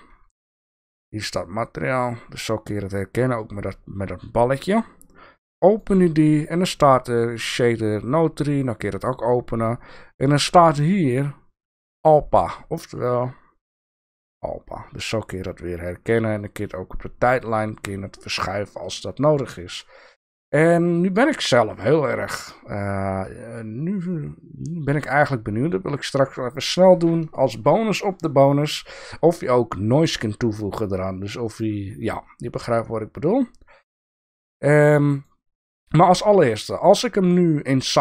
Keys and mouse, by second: 5.7 click, 7.3 click, 8.6 click, 10.7 click, 17.4 click, 21.7 click, 24.1 click, 24.1 middle click, 30.8 click.